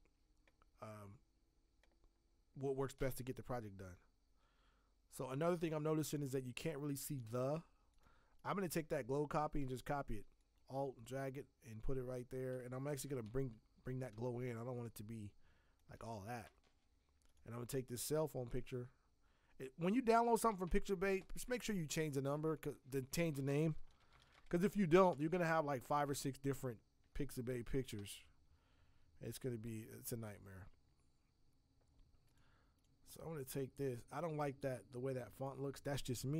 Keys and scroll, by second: 12.8 ctrl+t, 20.5 alt+Escape, 23.6-24.8 typing, 28.1 alt+Tab, 33.8 alt+Tab.